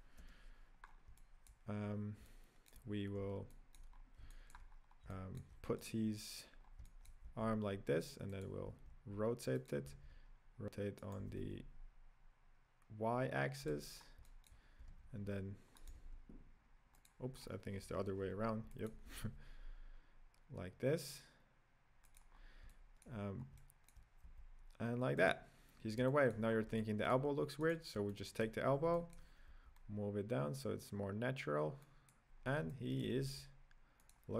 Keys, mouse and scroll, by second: 0.3 KP_Decimal, 0.9 scroll down 5, 1.1-2.9 middle drag, 2.9-3.5 scroll down 1, 3.5-3.9 shift+middle drag, 3.9-4.2 scroll down 3, 4.2-4.7 shift+middle drag, 4.7-5.1 scroll down 4, 5.1-6.0 shift+middle drag, 6.0 right click, 6.5 scroll down 3, 6.8-7.4 shift+middle drag, 7.4 g, 8.9 r, 10.1 r, 14.0 scroll up 1, 14.3-14.9 middle drag, 14.9 r, 16.3 r, 17.4-17.9 scroll down 1, 17.9 KP_Decimal, 18.5 scroll down 4, 18.8-19.4 middle drag, 19.4 r, 22.5 scroll down 4, 22.8-23.4 middle drag, 23.4 scroll down 1, 23.6-24.5 middle drag, 24.5 g, 26.1-26.5 shift+middle drag, 26.5 scroll up 4, 26.8-27.9 middle drag, 27.9 right click, 28.2-29.8 middle drag, 29.8 g, 32.4-32.8 scroll down 2, 32.8-33.5 middle drag, 33.5 g.